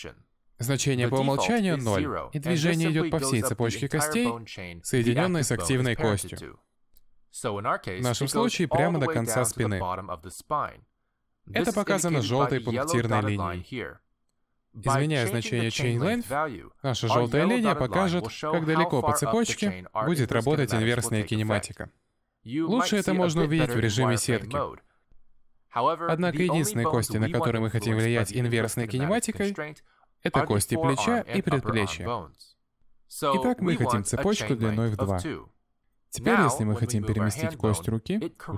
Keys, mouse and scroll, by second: 4.7 middle click, 8.7 middle click, 11.1 middle click, 17.0 click, 18.6 click, 20.9 click, 21.4 middle click, 21.9 shift+middle click, 23.5 click, 24.2 middle click, 25.5 click, 26.1 click, 27.1 click, 28.4 click, 29.2 click, 29.9 click, 30.1 click, 30.3 click, 31.1 middle click, 32.1 middle click, 33.9 middle click, 35.5 click, 35.8 shift+middle click, 36.0-36.4 scroll down 1, 36.4 g.